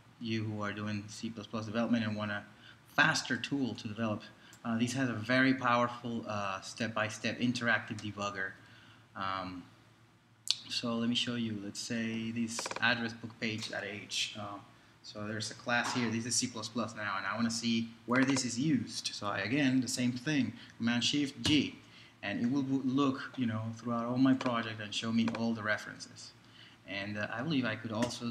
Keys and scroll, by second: 21.4 shift+super+g.